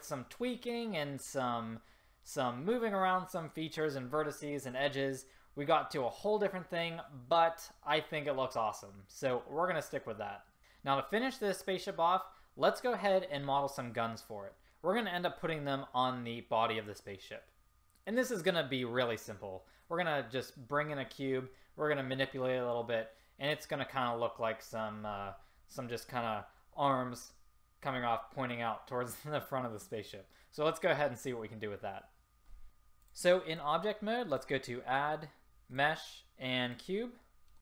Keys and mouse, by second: 32.7 ctrl+z.